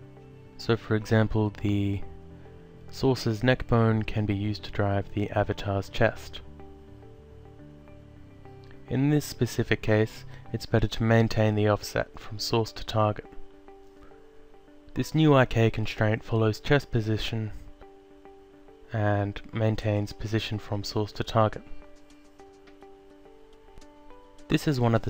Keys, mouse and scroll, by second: 0.8 Up, 1.7 Down, 3.0 Up, 3.5 Down, 5.3 alt+click, 7.6 ctrl+click, 9.1 click, 10.8 alt+click, 12.1 click, 15.5 alt+click, 20.8 alt+click.